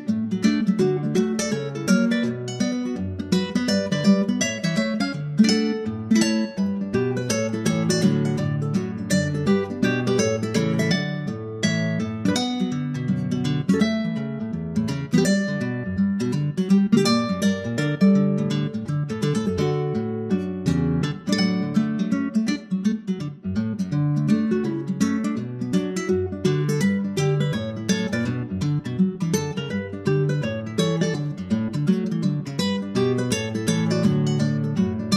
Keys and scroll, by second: 6.7 super+Right, 12.0 super+Right, 31.6 super+Right, 32.1 super+Up.